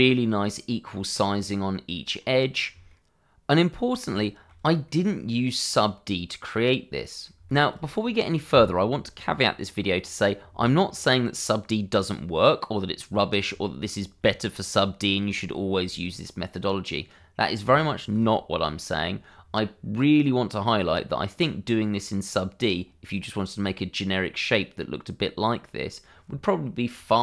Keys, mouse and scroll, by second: 0.7 scroll down 1, 1.0 middle click, 2.9 shift+middle click, 4.0 middle click, 4.1 shift+middle click, 4.9 middle click, 10.9 middle click, 12.8 scroll up 1, 13.1 shift+middle click, 13.6 middle click, 15.5 shift+middle click, 16.4 middle click, 17.8 shift+middle click, 24.3 middle click.